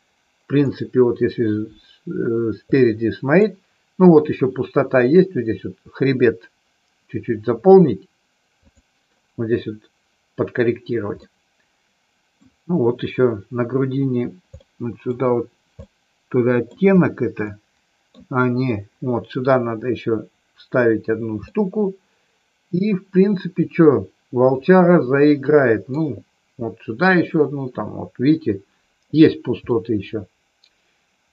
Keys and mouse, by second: 2.7 middle click, 11.2-12.3 middle drag, 14.7 middle click, 15.8 middle click, 17.5 middle click, 21.5-26.0 middle drag, 29.7-31.3 middle drag.